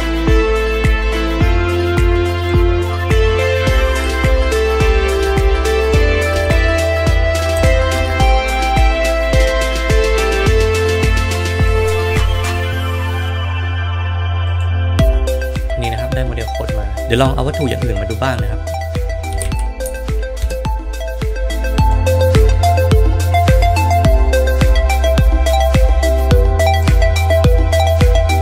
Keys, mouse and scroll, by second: 2.3 click, 3.9 KP_1, 5.1 s, 6.2 s, 7.4 s, 7.5 g, 9.7-11.7 right drag, 12.5 s, 15.5 click, 16.9-21.0 drag, 21.7-23.8 drag.